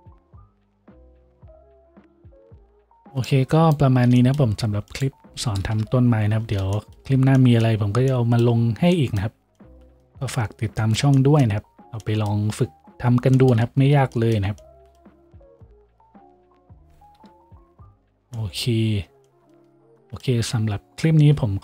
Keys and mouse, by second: 2.2-21.6 drag, 5.8 KP_Decimal, 6.2 a, 17.2 KP_5.